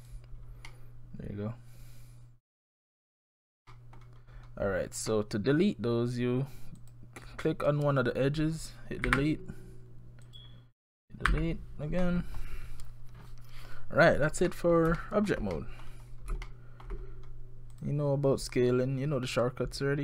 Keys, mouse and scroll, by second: 0.7 middle click, 3.7 middle click, 4.3-4.7 scroll up 4, 4.7-5.1 scroll down 4, 5.1 middle click, 6.8 click, 9.1 Delete, 10.3 click, 11.3 Delete, 12.0 middle click, 14.5 middle click, 15.0 shift+middle click, 15.3 shift+scroll down 1, 15.5 middle click, 16.1 scroll up 3, 16.5 shift+middle click, 17.1-17.7 scroll down 5, 17.7 click.